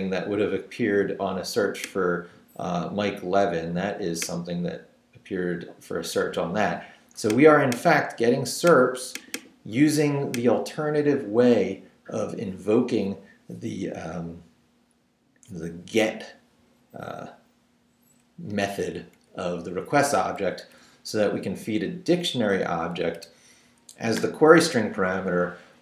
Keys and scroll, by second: 18.5 Right, 19.2 Left, 20.6 Right, 22.5 Right.